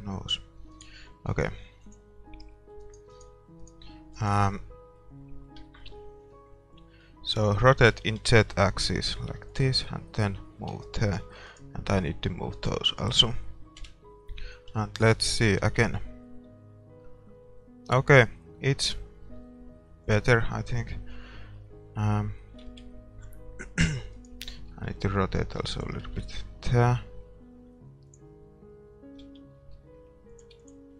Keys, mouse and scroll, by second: 2.9-5.5 right drag, 4.5-9.2 middle drag, 7.9 r, 10.3-14.4 drag, 11.5-13.8 right drag, 13.8 KP_0, 14.4 middle click, 15.8-17.3 middle drag, 15.8 shift+z, 20.3-22.0 drag, 22.7 shift+z, 22.9-24.3 middle drag, 24.2-25.8 right drag, 24.7 r, 26.2 shift+z, 28.2-29.8 drag, 29.3 shift+z, 29.8 r.